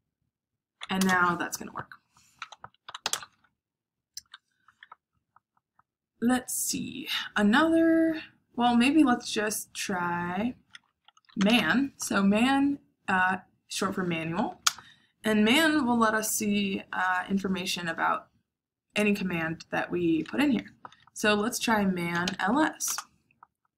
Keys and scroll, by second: 0.9 Return, 2.5-3.4 typing, 4.8-5.6 typing, 11.0-12.0 typing, 14.5 space, 21.8-22.7 typing, 22.8 Return.